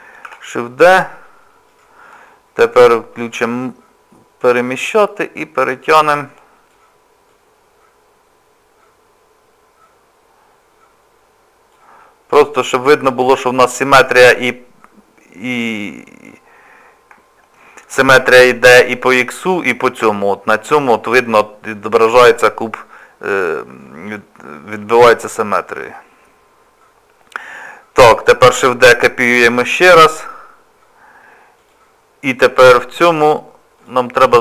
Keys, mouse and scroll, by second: 0.3 shift+d, 3.3 click, 4.7 click, 7.3 click, 12.5 click, 16.6-17.1 scroll down 2, 17.2 shift+middle click, 28.5 shift+d, 33.8 click, 34.3-34.4 scroll down 4.